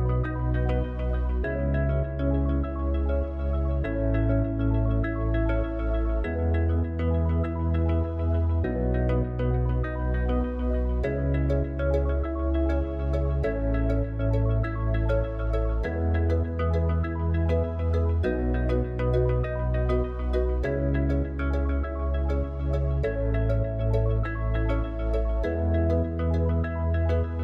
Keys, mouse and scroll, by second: 0.1 alt+shift+click, 4.6 alt+shift+click, 8.9 e, 15.6 KP_1, 19.2-22.1 middle drag, 22.1 f, 23.5 Tab.